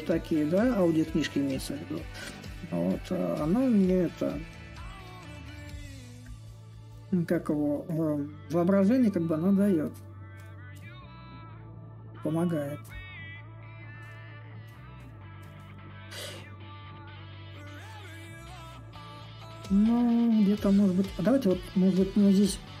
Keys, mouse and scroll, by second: 5.4-10.5 drag, 12.6-17.7 drag, 18.6-22.8 drag.